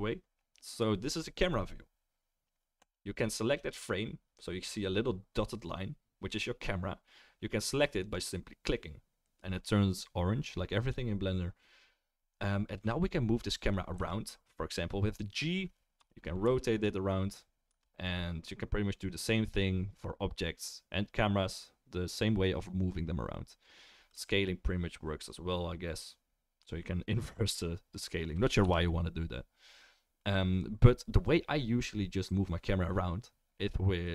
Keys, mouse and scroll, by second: 3.6 click, 3.6 middle click, 8.0 click, 13.9 g, 16.4 r, 17.2 middle click, 17.7-27.9 right drag, 24.1 s, 27.9-34.1 middle drag, 28.1-34.1 right drag.